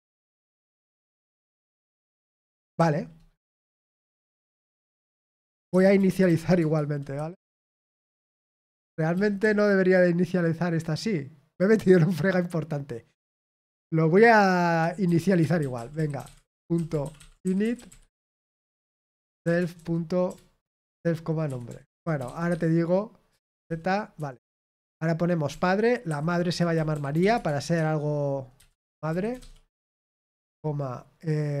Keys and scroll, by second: 5.7-7.8 typing, 8.8 Escape, 9.1 typing, 15.7-22.7 typing, 24.8 typing, 26.0-30.2 typing.